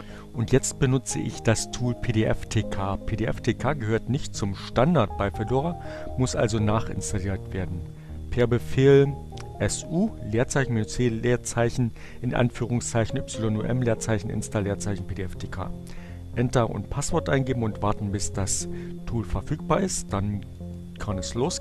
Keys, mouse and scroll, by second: 5.5 Up, 18.3 BackSpace, 21.2-21.6 typing.